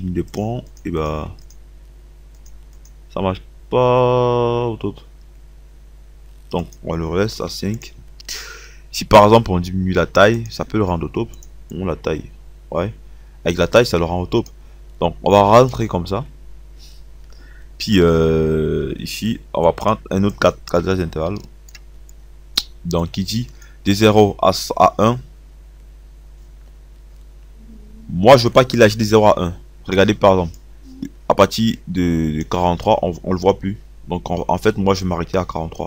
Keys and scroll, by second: 7.5 KP_5.